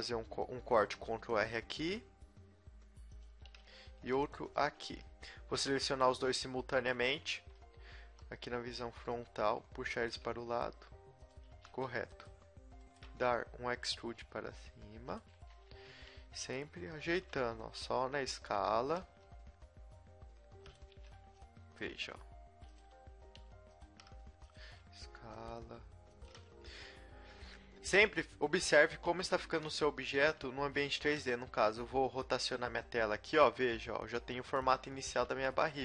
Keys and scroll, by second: 3.4 a, 3.9 ctrl+r, 4.8 a, 8.0 g, 10.1 z, 10.3 g, 11.5 a, 13.9 e, 15.4 z, 15.7 s, 17.2 a, 17.5 b, 19.1 g, 21.0 a, 21.2 b, 21.9 g, 23.0 r, 24.0 g, 24.6 s, 25.5 g, 29.0-31.0 typing, 31.9 Tab, 35.0 Tab, 35.7 a.